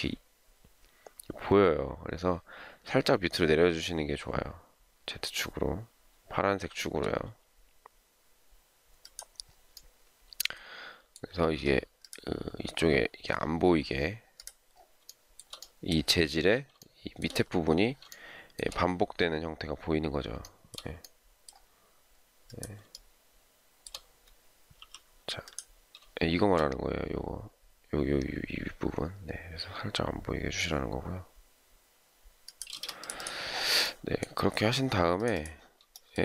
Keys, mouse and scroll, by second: 11.5 space, 15.1 shift+middle click, 16.8 shift+middle click, 18.1 shift+middle click, 20.4 shift+middle click, 22.9 shift+middle click, 24.7 m, 32.7 space, 36.0 shift+middle click.